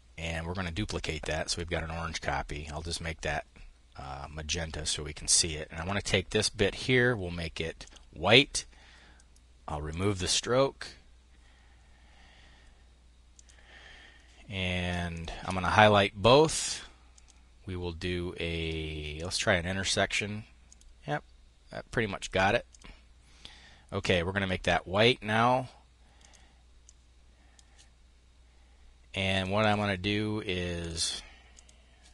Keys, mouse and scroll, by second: 2.0 click, 5.2 click, 7.2 click, 9.2 click, 12.7-14.4 drag, 14.6 shift+click, 16.6 click, 18.6 click, 20.0 click, 22.1 click, 23.4-25.7 drag, 26.3 click, 28.7 click, 30.2 click, 31.0 click.